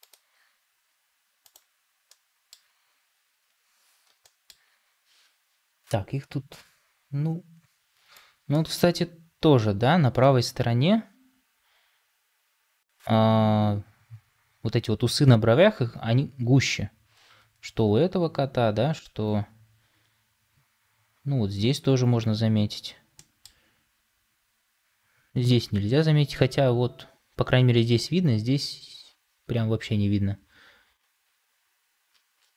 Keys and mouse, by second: 2.0 middle click, 4.1 middle click.